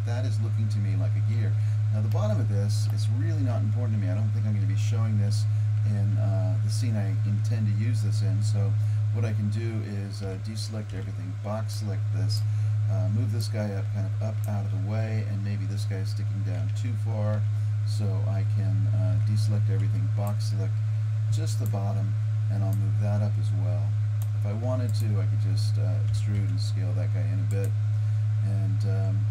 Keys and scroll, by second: 1.7 Tab, 10.3 a, 11.0 b, 16.7 Tab, 17.4 Tab, 19.1 a, 19.9 b, 26.2 e.